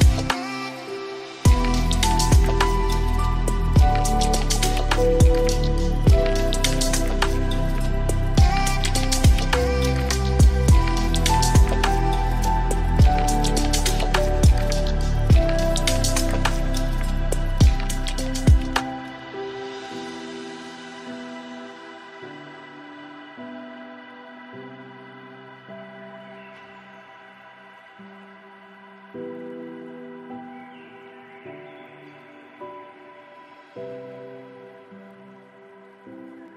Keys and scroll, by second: 5.1 ctrl+a, 15.2 ctrl+shift+], 26.4 ctrl+space, 32.0 ctrl+a.